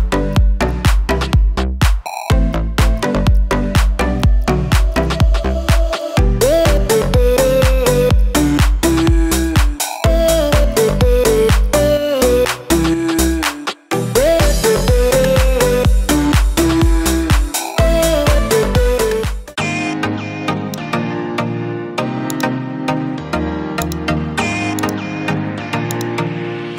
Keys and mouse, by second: 0.6-4.8 drag, 5.0 click, 5.4 space, 5.9 click, 8.8-10.5 drag, 11.6-14.6 drag, 15.2 click, 15.7-16.8 drag, 17.4 space, 18.7 click.